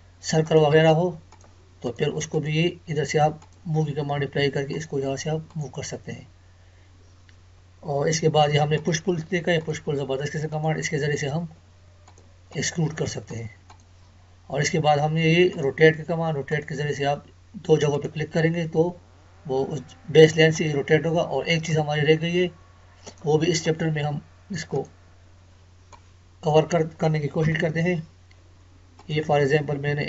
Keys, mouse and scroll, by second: 0.4 click, 8.8 click, 20.8 Escape, 21.1-22.0 scroll down 1, 22.2 Escape, 23.1-27.4 drag, 27.4 Delete, 29.0 click.